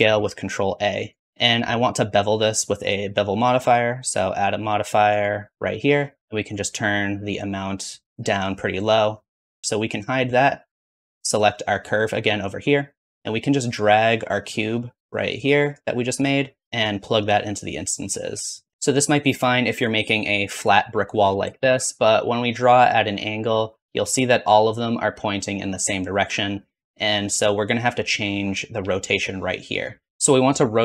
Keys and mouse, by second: 2.8-3.9 middle drag, 15.3 click, 18.7 ctrl+z, 18.7 click, 21.6 ctrl+z, 22.2-26.9 drag, 26.9-28.9 middle drag, 28.9 click, 29.8 middle click, 30.7-30.8 drag.